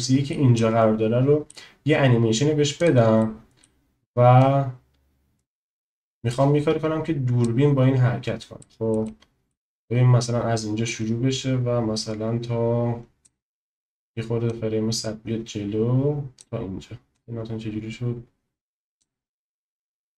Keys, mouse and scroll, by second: 0.6 middle click, 2.8 drag, 3.2 middle click, 4.3 click, 8.6 middle click, 9.2 shift+middle click, 11.0-13.4 drag, 14.5 click, 17.3-19.1 drag, 19.9 click.